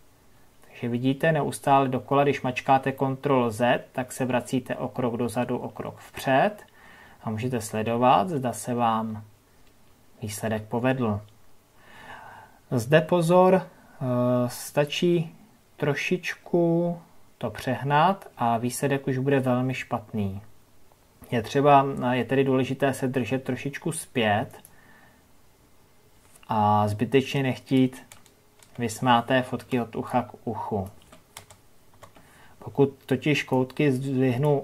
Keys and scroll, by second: 29.2 ctrl+KP_Add.